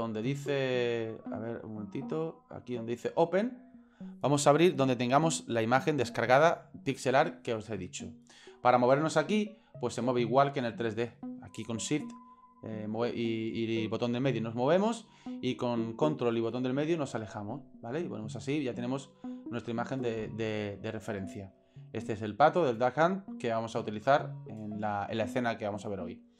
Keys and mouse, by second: 0.2-1.7 right drag, 2.3 middle click, 3.8 click, 10.0 shift+middle click, 11.0 shift+middle click, 12.2 shift+middle click, 12.9 shift+middle click, 13.8 shift+middle click, 16.6-19.2 ctrl+middle drag, 19.5 ctrl+middle click, 20.8 shift+middle click, 21.8 ctrl+middle click, 23.2-24.6 shift+middle drag.